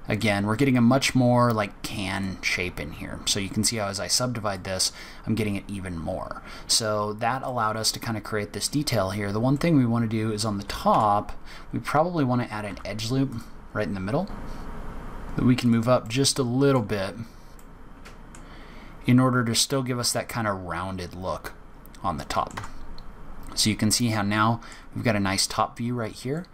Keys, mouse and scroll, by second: 0.4-1.0 scroll down 1, 1.0-1.8 scroll down 1, 2.1 click, 4.1-4.5 scroll up 2, 4.5 middle click, 6.8-7.4 scroll up 6, 7.4 middle click, 8.9-9.5 scroll up 2, 9.5 middle click, 10.6-11.4 scroll down 2, 10.8 Tab, 12.6 ctrl+r, 14.9 g, 16.0 middle click, 17.1-17.5 scroll up 1, 17.5 middle click, 18.5-19.0 scroll down 2, 20.3-21.3 scroll down 6, 21.3-21.6 scroll up 1, 21.6 scroll down 2, 22.1 middle click, 22.5 Tab, 22.9-23.3 scroll down 2, 23.3-24.0 scroll up 4, 24.1 middle click, 24.9 scroll up 2, 26.0-26.3 scroll down 4, 26.3 middle click.